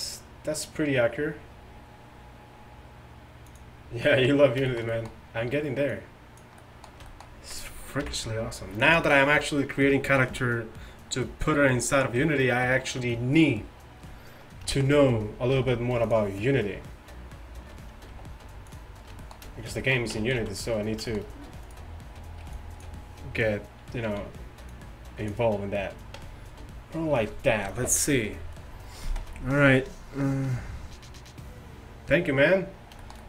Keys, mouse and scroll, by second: 6.0-7.0 middle drag, 7.2-8.1 drag, 8.1 KP_1, 14.8-15.6 middle drag, 15.6 g, 18.2 g, 20.2 Tab, 20.4 z, 22.5 b, 24.2 z, 24.7-27.4 drag, 26.2 Tab.